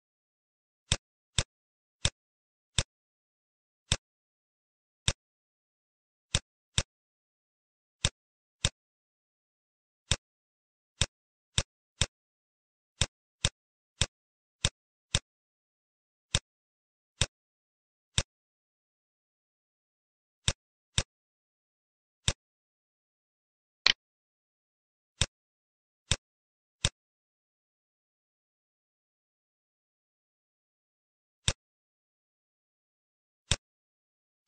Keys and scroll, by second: 0.0 ctrl+shift+a, 5.0 Page_Down, 19.3 Home, 21.8 F1, 28.0 =, 28.4 -.